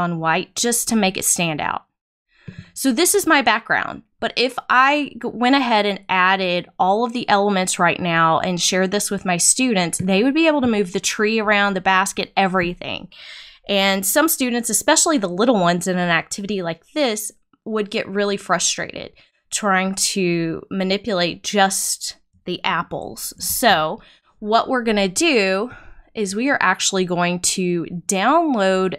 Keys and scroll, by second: 23.4 super+z.